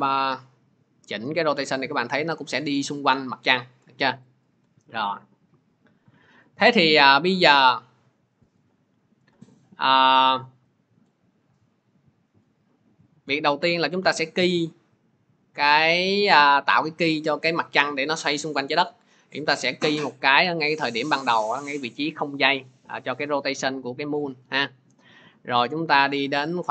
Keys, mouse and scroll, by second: 1.0 r, 4.1 click, 4.3 ctrl+z, 6.9 click, 11.0 click, 16.2 click, 20.3 click, 22.4 click.